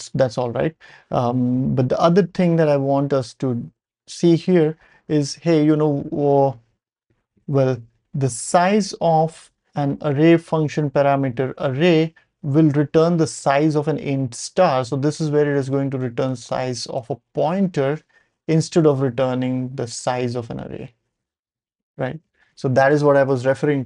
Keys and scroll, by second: 4.6 ctrl+alt+super+p, 5.7 ctrl+alt+super+p, 6.2 ctrl+alt+super+p, 7.4 ctrl+alt+super+p.